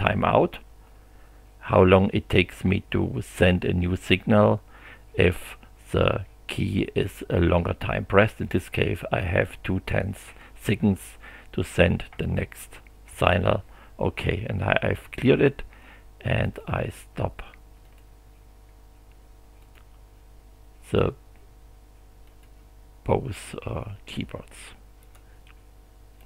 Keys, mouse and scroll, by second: 13.1 x, 16.4 click, 17.8 click, 19.6 click, 20.8 click, 22.3 click, 25.0 click, 26.2 click.